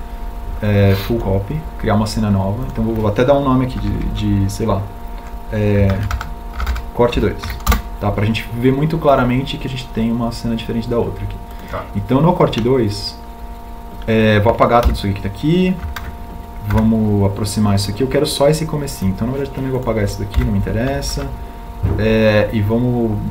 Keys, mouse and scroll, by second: 14.9 Delete.